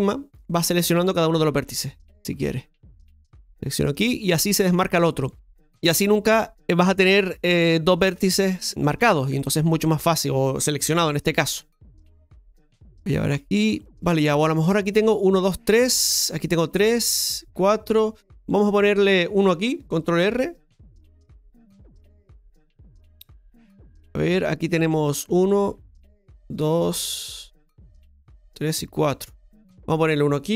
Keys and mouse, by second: 0.5 right click, 1.1 right click, 1.6 right click, 2.2 shift+middle click, 3.8 right click, 9.3 shift+middle click, 13.8 right click, 21.0 click, 23.0-24.1 middle drag.